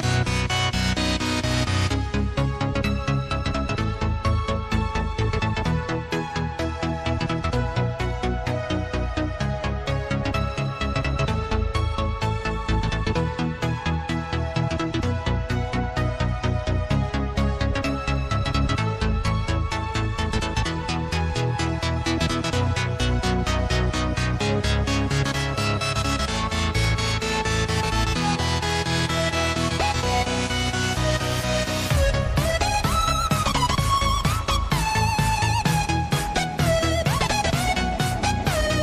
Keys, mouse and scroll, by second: 0.2 Tab, 1.4 click, 3.4 click, 3.9 click, 4.5-7.4 drag, 10.9 KP_1, 11.7 scroll up 1, 12.9 s, 17.2 click, 18.7-19.6 scroll up 2, 19.6-20.7 drag, 20.7-21.6 scroll up 2, 21.6 click, 23.7 click, 25.1 click, 26.1-28.2 scroll down 1, 28.2-29.8 drag, 29.8-30.3 scroll up 1, 31.4-33.0 drag, 34.6 KP_1, 35.3 scroll up 1, 36.5-37.2 drag, 37.2 scroll up 1, 38.2 click.